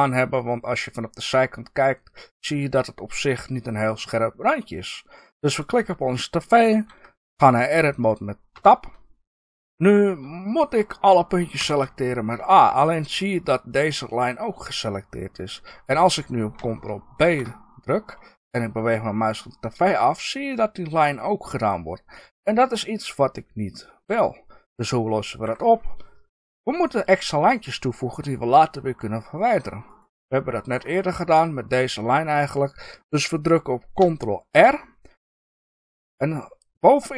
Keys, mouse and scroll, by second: 5.5 click, 8.5 Tab, 11.5 a, 17.1 ctrl+b, 25.4 Escape, 29.8 click, 30.4-30.9 scroll down 2, 30.9-37.1 middle drag, 34.5 ctrl+r.